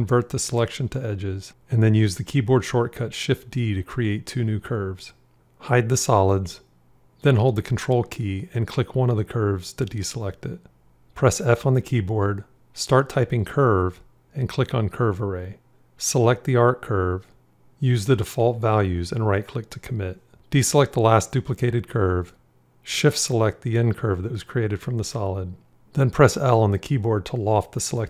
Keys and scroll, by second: 1.4 shift+d, 11.1 f, 26.6 l.